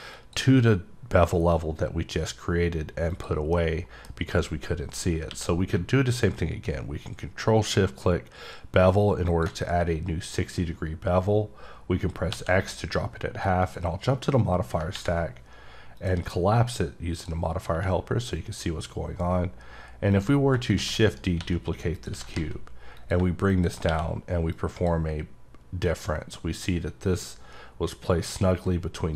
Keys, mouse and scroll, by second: 0.1 click, 3.1 click, 3.5 middle click, 9.3 click, 13.6 click, 16.0 click, 17.2 click, 20.1 click, 21.1 right click, 21.9 click, 23.0 click, 23.5 click, 24.5 click, 26.0 click.